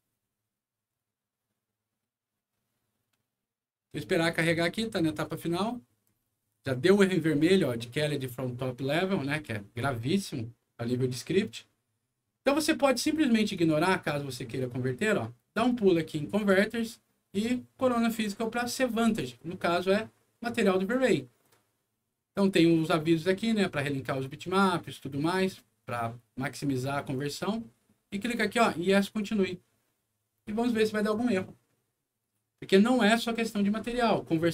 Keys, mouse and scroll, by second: 13.5 click, 16.3 click, 19.0 click, 27.1-28.2 drag.